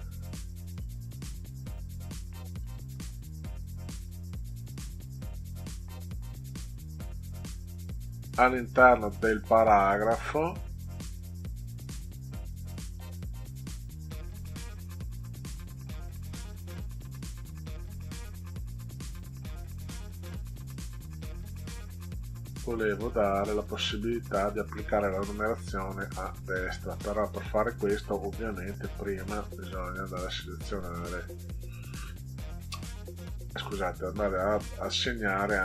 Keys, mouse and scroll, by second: 0.7 click, 2.5 click, 4.0 click, 7.6-10.5 drag, 17.4 click, 21.1-22.5 drag, 28.4 drag, 30.1 click, 31.1 right click, 33.5 click, 34.1-34.5 drag, 35.5 click.